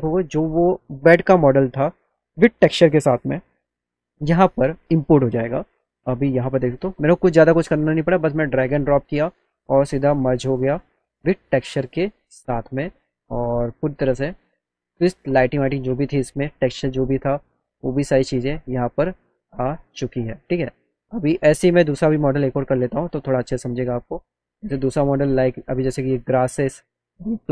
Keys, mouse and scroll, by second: 7.6 click, 8.1 click, 9.8 click, 11.9 click, 12.6-13.9 alt+middle drag, 18.1 middle click, 23.3 click, 24.2 click, 25.7 click, 26.4 click, 26.6 click.